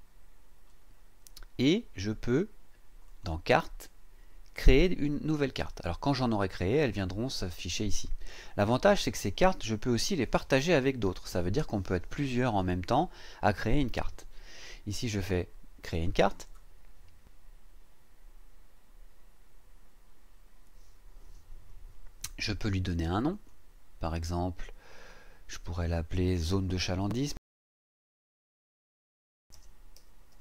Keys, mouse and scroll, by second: 3.1 click, 15.8 click, 23.3 click, 24.9 click, 27.8-30.4 typing.